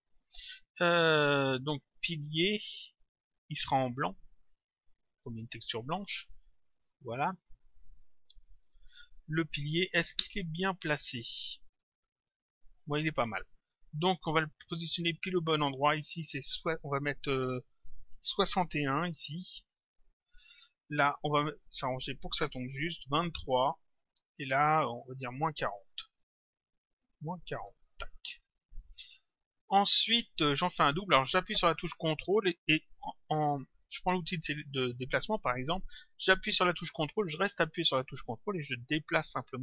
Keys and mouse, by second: 2.2 click, 4.6 click, 6.8 click, 8.4 click, 11.2 click, 14.3 click, 15.8 click, 19.7 Return, 21.8 click, 24.1 Return, 24.6 click, 27.7 Return, 33.7 click, 38.8 ctrl+click.